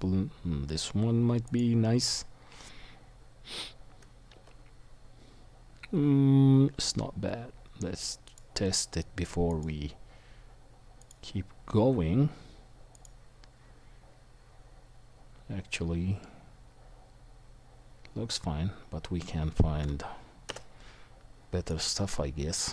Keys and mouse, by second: 4.3 f, 4.4-8.4 drag, 4.4-17.8 middle drag, 4.4-16.2 right drag, 9.5-16.2 drag, 16.5 click, 16.5 right click, 17.0-17.8 drag, 17.0-17.8 right drag, 18.0 middle click, 18.4-22.7 middle drag, 20.5 Delete.